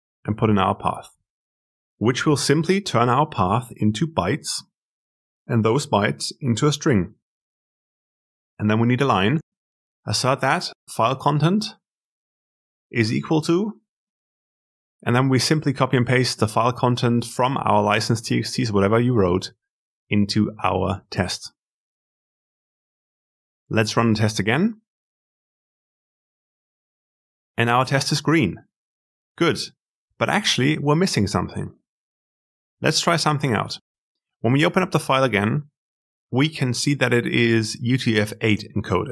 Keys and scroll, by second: 15.1 ctrl+w, 17.5 ctrl+c, 19.4 ctrl+v, 23.0 ctrl+alt+F10.